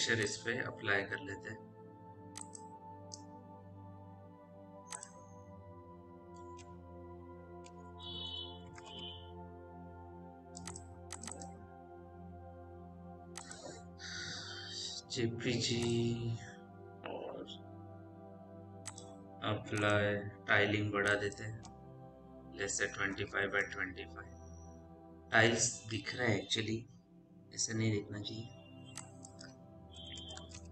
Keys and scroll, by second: 7.5-9.3 typing, 14.9 j, 22.9 5, 23.0 Tab, 23.2 KP_2, 23.5 Tab, 30.0 KP_0, 30.2 Tab, 30.4 KP_1.